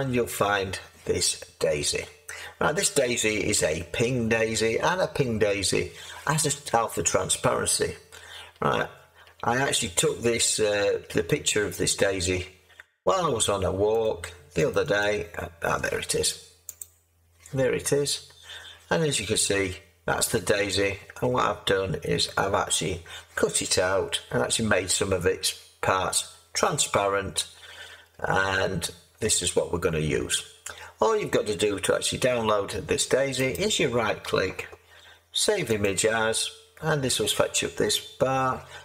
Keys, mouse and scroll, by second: 1.3-2.5 scroll, 2.5-3.0 scroll, 3.0-4.0 scroll up 4, 4.0-5.4 scroll up 3, 5.4 scroll up 1, 5.4-6.8 scroll down 3, 6.8-8.5 scroll down 1, 8.5-9.7 scroll down 16, 10.2-11.0 scroll down 8, 11.0-11.5 scroll up 7, 11.5-14.0 middle drag, 14.0-15.2 drag, 16.7 click, 17.6 scroll, 18.3 scroll, 21.2-33.5 middle drag, 21.2-21.8 scroll, 22.6-26.6 scroll, 27.2-27.7 scroll, 27.7 scroll, 28.6-29.3 scroll, 29.3-30.8 scroll, 33.5-35.8 right drag, 35.8-38.8 drag.